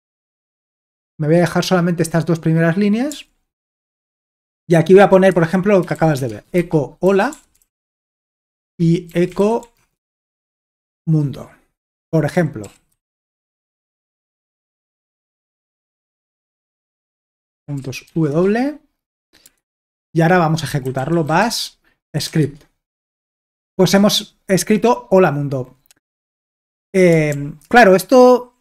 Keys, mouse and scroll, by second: 0.0-0.5 typing, 3.1 typing, 3.8 Return, 5.1-10.6 typing, 11.9-15.8 typing, 17.2 Escape, 17.8 typing, 18.3 Return, 19.7 alt+Tab, 20.6-22.6 typing, 22.9 Return, 27.3 ctrl+l.